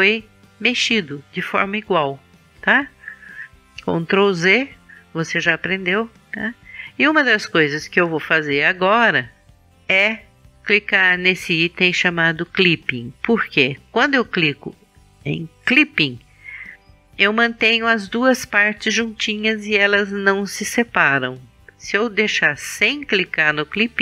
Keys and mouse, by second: 4.3 ctrl+z, 11.9-13.9 drag.